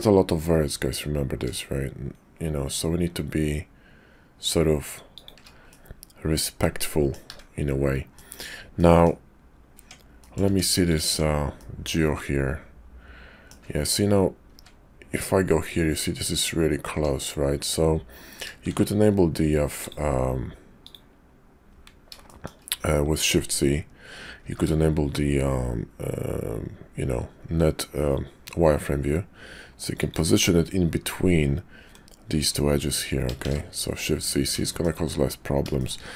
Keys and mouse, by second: 5.7-7.1 middle drag, 7.3 `, 8.1 middle click, 8.7 middle click, 9.7 Tab, 10.1 middle click, 10.3 click, 10.5 Tab, 11.1 Tab, 11.5-13.5 drag, 16.9 Tab, 18.7 shift+z, 20.7 click, 22.2 shift+click, 24.3 g, 33.4 shift+z, 34.6 shift+middle click, 35.8 shift+middle click.